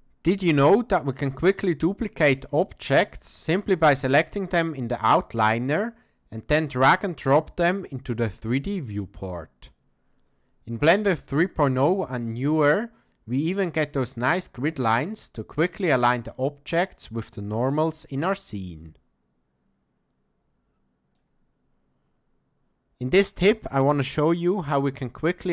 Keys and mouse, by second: 5.8-9.7 drag, 11.0-16.9 drag, 18.7-21.2 drag.